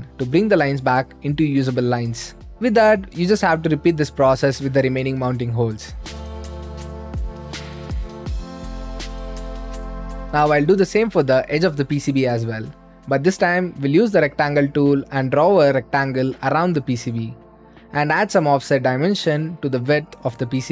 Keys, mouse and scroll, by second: 0.0-1.1 drag, 1.7 Escape, 2.1-3.2 drag, 4.0-6.1 drag, 6.3 scroll up 3, 6.6 click, 6.8-9.8 typing, 6.9 click, 7.1 scroll up 2, 7.2 middle click, 7.2 scroll, 7.3 scroll up 2, 7.3 middle click, 7.3 scroll, 7.4 scroll up 2, 7.5 click, 7.7 click, 8.0 middle click, 8.0 scroll up 2, 8.5 click, 8.7 scroll up 4, 8.8 middle click, 8.9 middle click, 9.0 click, 9.1 ctrl+z, 9.4 ctrl+z, 9.5 click, 9.8 click, 10.1 middle click, 10.2 click, 12.8-14.8 drag, 14.8 Escape, 15.9-17.0 drag, 17.9-19.0 drag, 19.0-20.1 drag, 20.2 click.